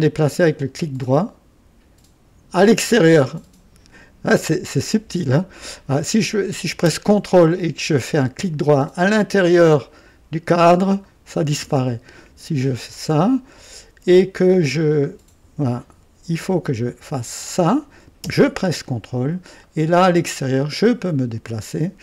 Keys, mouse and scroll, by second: 0.1-0.8 ctrl+right drag, 1.0-2.6 ctrl+right drag, 5.2 click, 11.0 ctrl+right click, 12.6 click, 14.5 right click, 17.1 click, 19.6 ctrl+right click, 20.7 ctrl+right click, 21.4 ctrl+right click.